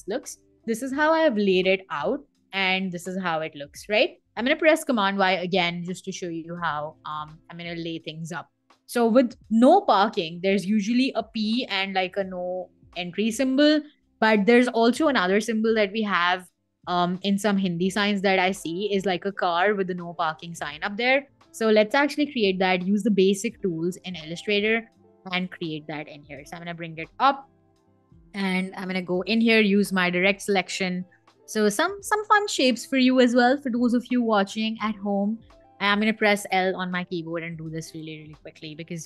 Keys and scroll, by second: 4.5 super+y, 21.8 m, 24.9 i, 26.3 shift+super+], 28.2 v, 29.2 a, 35.4 l, 38.3 i.